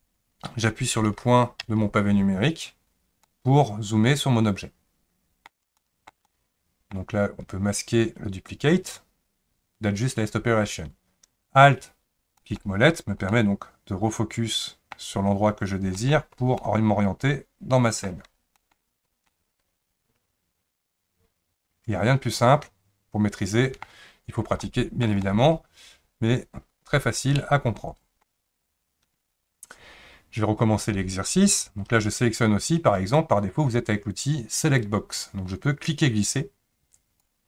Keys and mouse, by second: 1.7 KP_Decimal, 3.2-5.5 middle drag, 5.8-6.1 shift+middle drag, 6.3-6.9 middle drag, 8.5 click, 12.4 alt+middle click, 13.3-14.9 middle drag, 15.9 alt+middle click, 16.6-18.1 middle drag, 18.5 alt+middle click, 19.3-23.8 middle drag, 24.6-25.1 shift+middle drag, 25.2-28.2 middle drag, 36.0-37.3 drag.